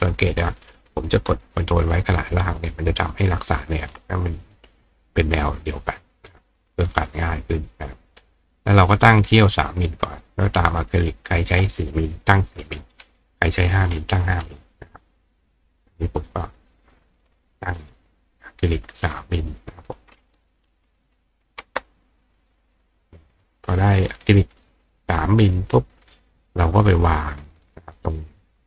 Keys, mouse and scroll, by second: 0.6-3.8 ctrl+drag, 4.1 click, 8.7 click, 9.4 click, 11.3 click, 14.9 click, 16.2 click, 17.1 click, 17.8 click, 19.9 click, 22.4 click, 23.3 click, 26.1-27.4 drag, 28.0 click.